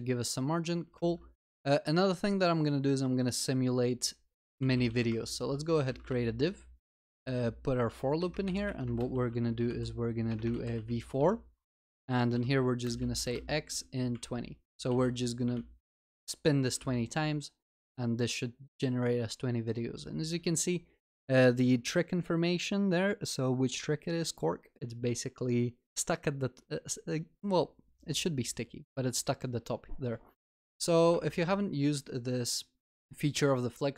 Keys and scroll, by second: 5.1 Tab, 8.5 alt+shift+Down, 15.0 ctrl+s, 15.5 ctrl+alt+shift+l.